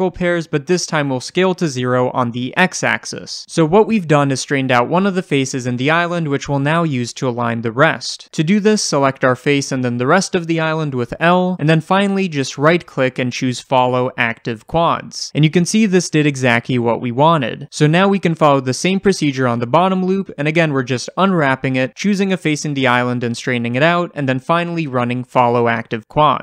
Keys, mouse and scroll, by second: 0.8 click, 1.8 s, 2.5 Return, 9.1 click, 10.1 l, 12.6-17.9 right drag, 15.0-16.9 scroll down 2, 16.9-17.9 scroll down 1, 18.2 click, 18.5-21.6 shift+middle drag, 19.8 l, 21.6 click, 21.6 shift+middle click, 21.7 scroll up 2, 22.1-25.1 typing, 22.2 drag, 23.1 click, 23.6 drag, 24.6 click, 25.2 right click, 25.7-26.2 scroll down 1, 26.2 click.